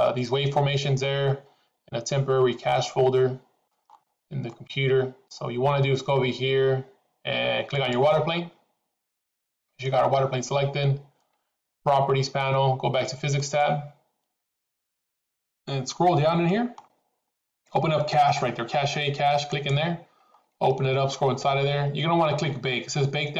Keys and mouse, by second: 2.7-3.7 middle drag, 4.5 middle click, 7.8 click, 13.4 click, 19.6 click.